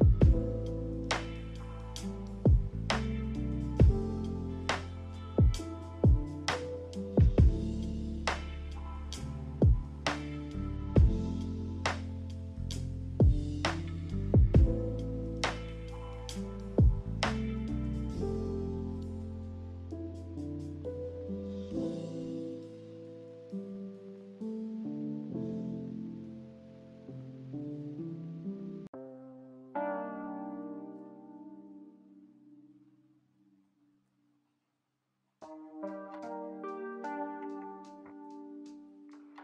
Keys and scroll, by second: 6.2 b, 8.8 Delete, 16.1 z, 21.3 d, 30.8 z, 37.7-38.9 typing.